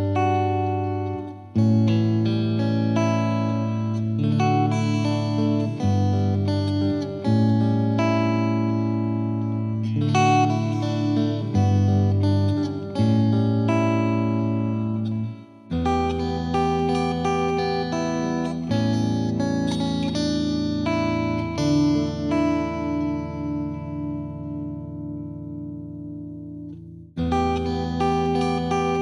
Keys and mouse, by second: 0.4 click, 1.1 click, 2.3 click, 4.1 click, 5.4 click, 5.5 click, 6.1 click, 6.9 click, 7.0 Page_Up, 7.4 click, 8.6 F2, 8.9 click, 9.4 click, 11.2 click, 13.2 click, 13.7 click, 14.5-15.5 drag, 16.2 right click, 16.5 click, 16.7 click, 17.2 click, 18.1 click, 18.6 click, 19.2 click, 19.5 click, 20.0 click, 20.6 click, 20.7 shift+click, 21.3 click, 22.0 click, 22.3 click, 22.6 click, 23.1 click, 23.9 click, 25.5 click, 25.6 ctrl+z, 26.3 click, 26.5 click, 26.7 shift+click, 27.1 click, 27.5 click, 27.9 click, 28.4 click, 28.6 click.